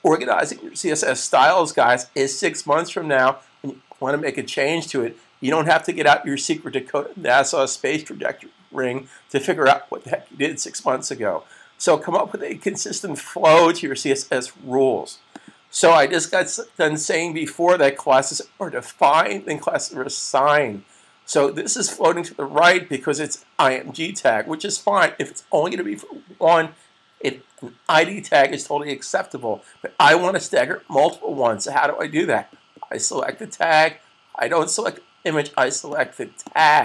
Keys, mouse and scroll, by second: 1.1 click, 15.4 click, 16.3 super+s, 33.4 click.